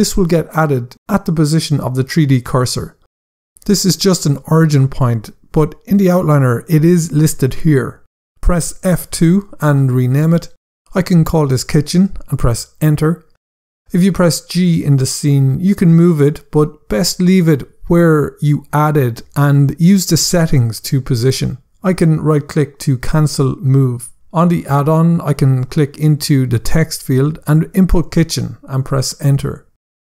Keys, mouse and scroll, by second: 11.2-12.4 typing, 12.9 Return, 14.9 g, 22.3 right click, 23.9 scroll down 1, 25.0 click, 26.6-28.0 typing, 28.4 Return.